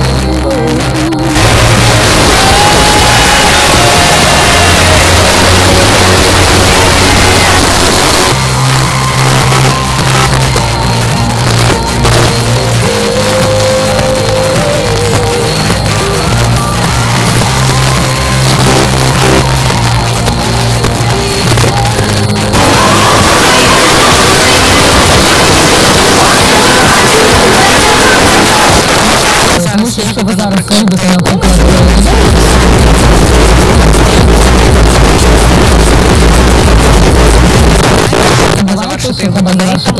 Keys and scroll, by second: 7.6 Page_Down, 28.8 Page_Down, 37.8 Page_Down, 39.4 space, 39.8 s.